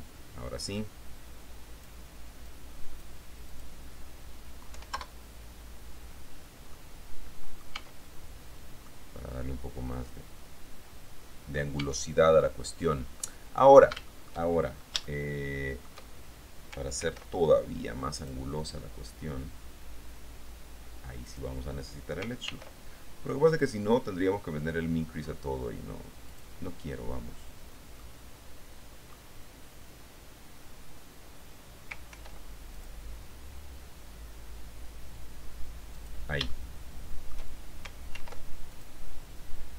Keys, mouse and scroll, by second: 0.9-3.9 drag, 4.9 1, 5.2 KP_Enter, 6.9-8.4 middle drag, 7.9 Tab, 9.1-11.9 drag, 12.0 Tab, 13.1-14.2 scroll up 2, 14.3 shift+click, 15.2-16.2 shift+middle drag, 17.2 ctrl+r, 18.3 click, 21.5 click, 22.7 ctrl+r, 23.7 click, 26.5 click, 28.2-29.5 middle drag, 32.3 ctrl+r, 32.9 ctrl+click, 36.1 click, 36.7-37.7 shift+drag, 38.3 ctrl+r, 38.9 ctrl+click.